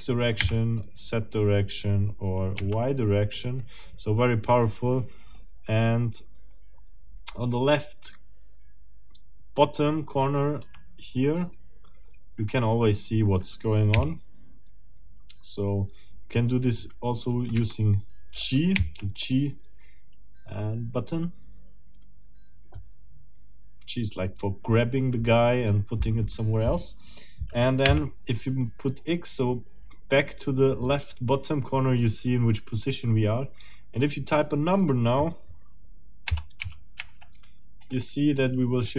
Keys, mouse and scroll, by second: 0.4 z, 2.6 y, 10.6 Escape, 13.9 g, 17.5 Escape, 18.8 g, 27.8 z, 36.2 0, 36.6 ., 37.0 2.